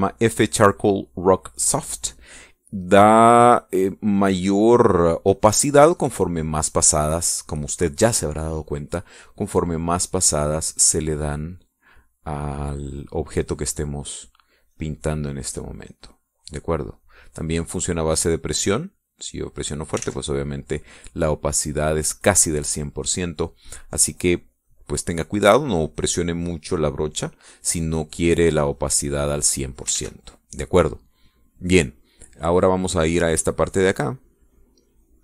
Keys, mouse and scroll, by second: 3.6 click, 4.6-8.1 drag, 10.4-19.2 drag, 20.0-21.0 drag, 21.2 ctrl+z, 23.8-30.8 drag, 31.2 ctrl+s, 34.4 click.